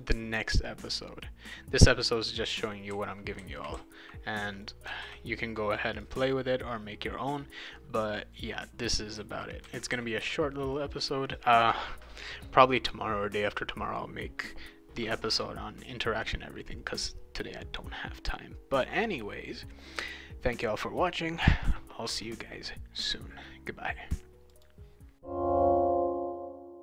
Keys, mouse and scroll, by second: 0.8-2.5 drag, 2.7-4.6 right drag, 2.9 d, 3.4 e, 3.7 d, 5.0 ctrl+s, 5.9 click, 8.5-10.7 right drag, 8.9-10.7 typing.